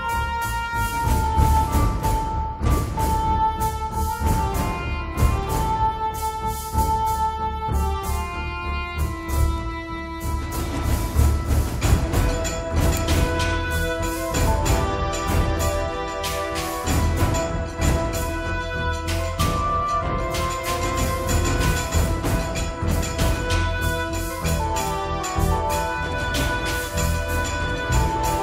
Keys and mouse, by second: 0.5 middle click, 0.9 click, 2.3 click, 3.7 f, 4.1-5.1 drag, 5.2 click, 6.0-7.1 middle drag, 8.1 click, 8.3 f, 8.7 1, 9.0 f, 9.5 middle click, 9.8-11.5 drag, 10.8 right click, 11.5 d, 11.5 f, 11.7-14.2 drag, 14.2 ctrl+z, 14.5 ctrl+z, 14.8 ctrl+z, 15.1-16.2 drag, 16.4 click, 16.9-19.6 drag, 19.6 1, 19.8 click, 20.2-22.1 middle drag, 20.2 right click, 20.8 click, 20.8 right click, 21.5 right click, 21.7-23.1 drag, 23.0 g, 23.1 f, 23.4 middle click, 23.4-24.9 drag, 24.9-27.9 middle drag, 28.3 click.